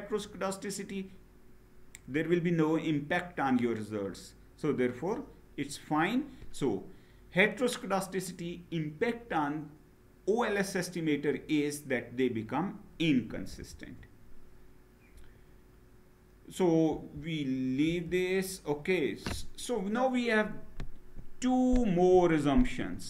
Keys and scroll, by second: 13.2 Down, 16.7 Down, 17.7 Down.